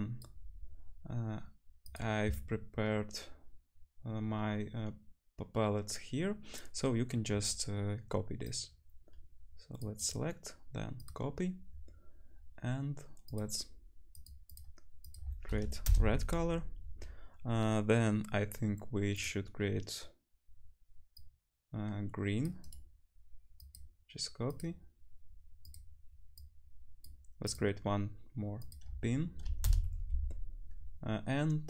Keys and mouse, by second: 1.0 middle click, 5.0-8.4 right drag, 8.4-13.3 middle drag, 13.4 click, 13.4 right click, 13.5-15.0 drag, 14.1 middle click, 14.1 right click, 14.5 middle click, 14.5 right click, 15.0-19.2 right drag, 15.7-24.5 drag, 15.7-19.2 middle drag, 21.2-24.5 middle drag, 21.2-24.5 right drag, 24.6-31.6 drag, 24.6 middle click, 24.6 right click, 25.7-27.5 middle drag, 25.7-27.5 right drag.